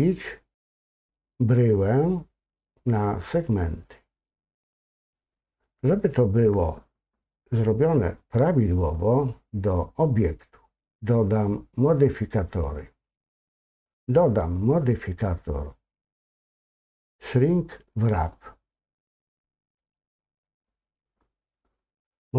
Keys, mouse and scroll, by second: 15.7-20.0 drag.